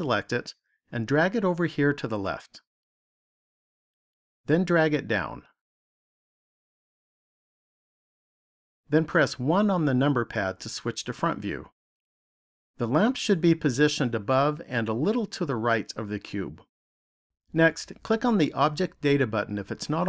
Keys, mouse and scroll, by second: 1.5 click, 5.3 click, 9.6 KP_1, 18.0 click.